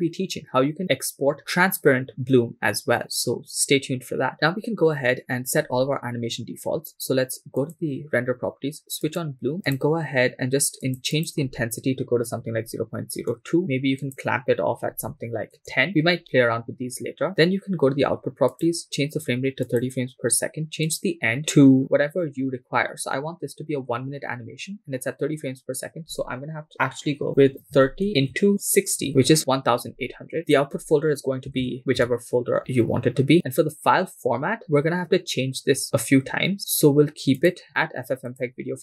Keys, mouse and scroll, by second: 7.6 click, 9.1 click, 9.6 click, 10.8-13.3 drag, 14.0-15.6 drag, 17.3 click, 18.5-19.9 drag, 20.9-29.1 drag, 30.4 scroll down 3, 30.4-32.1 drag, 31.6 /, 34.5-35.9 scroll down 2, 36.6-37.3 scroll down 1, 37.3 scroll down 1, 37.4-38.6 drag.